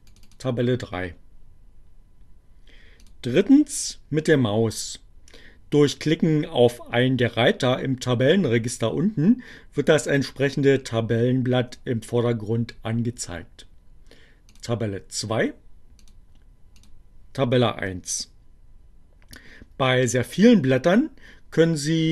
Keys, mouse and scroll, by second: 2.3 click, 14.3 click, 15.8 click, 16.9 click.